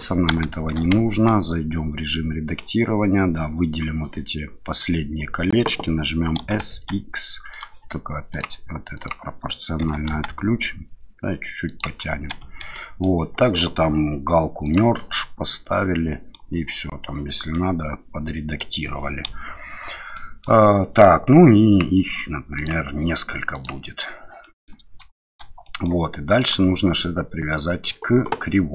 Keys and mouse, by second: 0.5 shift+middle drag, 1.1 Tab, 6.4 s, 6.7 x, 7.5 click, 8.3 click, 8.9 click, 9.8 s, 10.1 x, 11.6 click, 12.0 middle click, 12.4 Tab, 12.8 middle click, 14.6 click, 15.1-16.3 middle drag, 17.5-18.6 middle drag, 19.2 KP_1, 20.1-20.4 middle drag, 22.5 click, 23.6 click, 24.4 middle drag, 25.1 shift+middle drag, 25.6 middle click, 26.4 click.